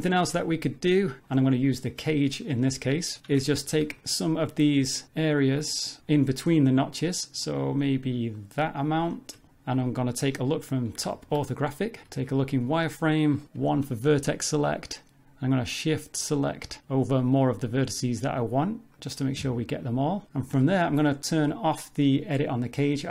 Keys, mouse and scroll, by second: 0.0 click, 0.2 Tab, 2.4 click, 3.8 3, 4.0 click, 4.4 middle click, 5.0 ctrl+click, 6.0 click, 6.7 shift+click, 7.0 shift+click, 7.3 shift+click, 7.7 shift+click, 8.2 shift+click, 8.5 b, 9.4 ctrl+middle click, 9.5 shift+middle click, 9.8 middle click, 11.1 shift+middle click, 11.6 scroll up 1, 12.0 z, 13.8 1, 16.7 middle click, 17.1 shift+click, 17.7 shift+click, 18.2 shift+click, 18.7 shift+click, 19.4 middle click, 19.8 shift+click, 20.6 shift+middle click, 21.1 middle click, 22.9 click.